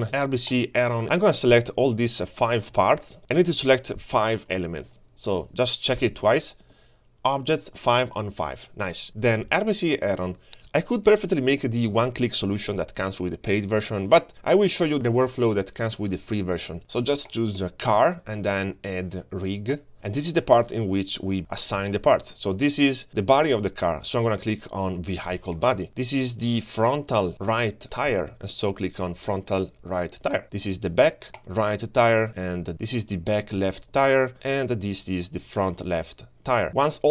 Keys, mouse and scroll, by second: 0.5 click, 1.3 middle click, 2.6 g, 3.2 shift+click, 3.9 shift+click, 11.1-17.4 drag, 19.7 click, 20.5-21.4 middle drag, 21.4 click, 21.9-22.6 middle drag, 23.1 g, 25.6 click, 26.4 click, 26.7-27.1 scroll up 5, 27.1 scroll down 1, 29.6 click, 30.1-30.8 scroll down 2, 30.8 click, 31.7 click, 32.2 middle click, 32.6-33.3 scroll down 2, 33.3 click, 33.9 click, 34.5 shift+middle click, 35.2 click, 36.0 click, 36.7 shift+middle click.